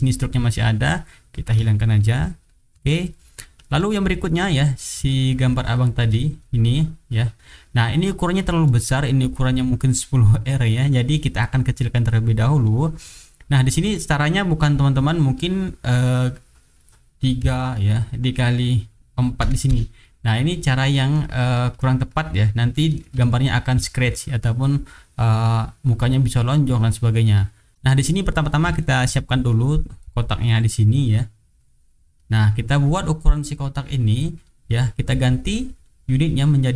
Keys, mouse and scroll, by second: 0.0 click, 1.9 shift+click, 2.4 shift+click, 2.9 shift+right click, 3.9 shift+click, 4.4 shift+click, 4.7 shift+middle click, 5.1 shift+right click, 6.0 shift+middle click, 6.9 click, 8.6-10.6 drag, 11.1 click, 11.5 middle click, 12.2 middle click, 12.6 click, 13.0-13.6 drag, 13.8-14.2 drag, 16.5 click, 17.4 KP_3, 18.5 click, 19.4 KP_4, 19.6 Return, 20.5 click, 20.9-21.9 middle drag, 20.9-21.3 scroll up 1, 21.8-22.4 scroll up 2, 22.1 middle click, 22.7 middle click, 22.7-23.1 scroll up 1, 23.2 shift+right click, 24.9 click, 26.0-27.2 drag, 27.3 click, 27.7 middle click, 28.1 click, 28.9 shift+right click, 29.1 shift+middle click, 30.4 click, 31.1-32.4 drag, 33.2 click, 35.3-36.7 drag.